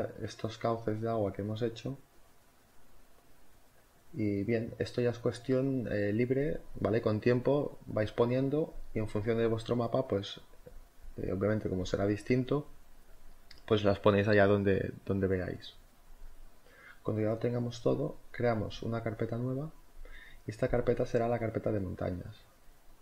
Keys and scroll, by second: 0.2 v, 4.5 z, 6.8 z, 17.3-19.7 typing.